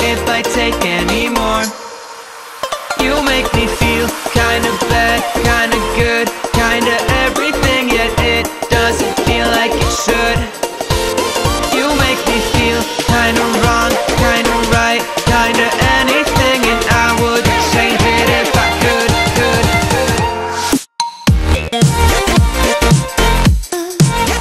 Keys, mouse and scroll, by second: 0.5-1.7 shift+drag, 4.5-5.1 shift+drag, 5.9 Up, 6.4 Right, 7.1 Right, 7.7 Left, 8.5 Up, 10.3 Down, 10.7 scroll down 1, 10.8-11.6 alt+shift+click, 11.8 scroll up 1, 14.7 click, 19.7 click, 21.7-24.4 typing.